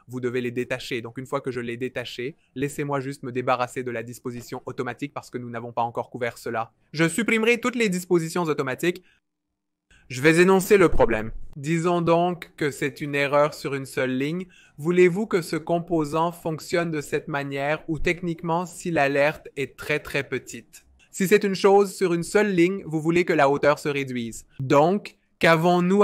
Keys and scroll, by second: 13.5-14.9 typing, 21.7-22.9 typing.